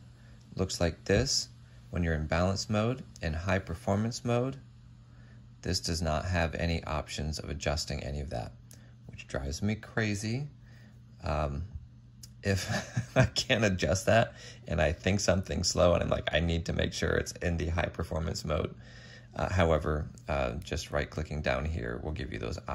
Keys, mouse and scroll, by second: 21.1 double click.